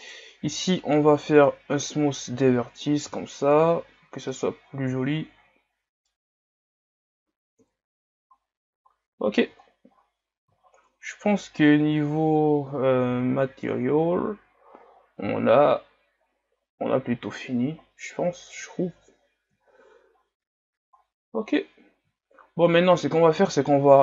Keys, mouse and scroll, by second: 0.0-2.0 right drag, 2.0 w, 3.2 a, 4.4-6.7 middle drag, 6.7 scroll down 4, 7.7 KP_1, 8.5-10.0 scroll down 7, 10.0 shift+scroll up 5, 10.7 shift+scroll down 1, 11.7 scroll up 1, 13.1-13.4 scroll up 8, 16.7-17.2 scroll down 11, 17.8 scroll up 4, 18.7 shift+scroll up 6, 19.7 shift+scroll down 1, 20.1-20.6 scroll up 8, 20.9-23.7 scroll down 10.